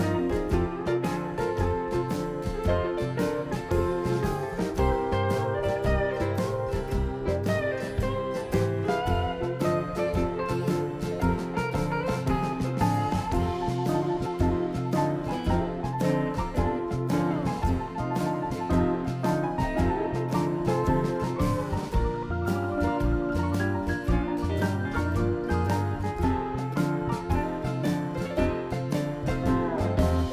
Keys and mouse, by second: 0.7 shift+s, 2.2 e, 3.6 e, 7.3 ctrl+r, 8.6 ctrl+r, 10.6 ctrl+r, 11.8 ctrl+r, 13.7-14.9 drag, 14.9 middle click, 18.1-23.4 middle drag, 25.6 KP_7, 27.0 click, 27.5 shift+a.